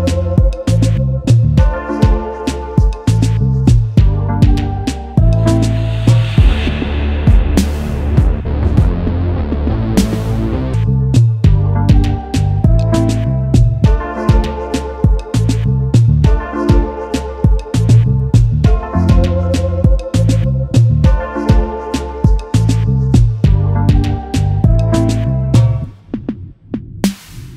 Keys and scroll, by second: 5.8 space, 6.1 ctrl+s, 11.9 space, 14.3 ctrl+s, 15.5 ctrl+s, 16.3 ctrl+s, 18.8 ctrl+s, 21.8 ctrl+s, 25.0 ctrl+s, 26.8 space.